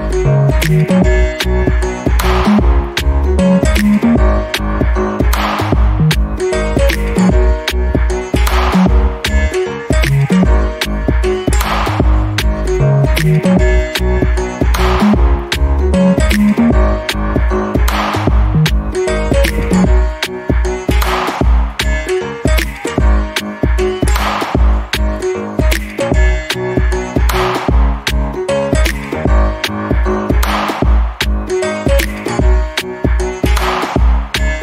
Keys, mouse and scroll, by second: 2.1 Escape, 3.2 click, 4.5 click, 4.8 right click, 5.7 click, 6.2 right click, 6.9 click, 7.5 scroll down 1, 7.7 alt+click, 9.6 right click, 10.1 click, 12.0 alt+middle click, 12.3 scroll down 2, 12.5 alt+click, 12.9 alt+middle click, 13.2 alt+click, 16.9 alt+middle click, 17.3 alt+click, 17.7 alt+middle click, 20.5 click, 24.4 alt+middle click, 24.8 alt+click, 25.8 alt+middle click, 26.2 scroll down 1, 26.7 alt+click, 27.7 scroll up 1, 28.0 alt+middle click, 28.3-28.6 alt+scroll up 1, 29.1 click, 29.4 alt+middle click, 29.8 scroll down 1, 30.7 click, 32.1 scroll down 1, 32.4 alt+middle click, 32.7 alt+click, 34.0 scroll up 1.